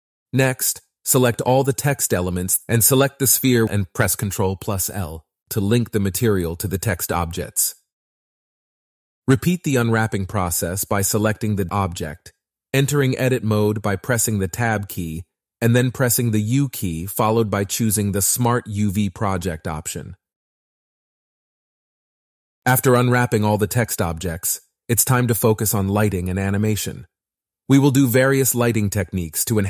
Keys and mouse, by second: 1.7 click, 3.8 ctrl+l, 5.7 click, 6.4 shift+click, 10.8 Tab, 10.8 a, 10.8 u, 11.0 Tab, 11.9 a, 12.4 u, 14.3 Tab, 14.5 Tab, 14.7-16.0 typing, 14.9 Tab, 15.0 click, 15.0 Tab, 15.6 click, 15.7 Tab, 15.8 Tab, 16.5 shift+middle click, 16.7 Tab, 16.8 Tab, 16.9 Tab, 17.0 Tab, 17.1 u, 17.6 Tab, 17.6 click, 17.7 Tab, 17.9 ctrl+r, 18.2 ctrl+z, 18.3 Tab, 18.5-22.7 typing, 18.9 shift+click, 18.9 Tab, 19.0 click, 19.1 Tab, 19.4 Tab, 19.5 click, 19.6 Tab, 19.6 click, 19.8 ctrl+a, 20.4 Tab, 20.4 click, 20.6 Tab, 21.3 middle click, 21.4 Tab, 21.4 click, 21.5 Tab, 21.9 Tab, 21.9 click, 22.0 Tab, 22.4 Tab, 22.5 click, 23.0 Tab, 23.0 click, 23.2 Tab, 23.9 u, 25.5 Tab, 28.5-29.6 drag.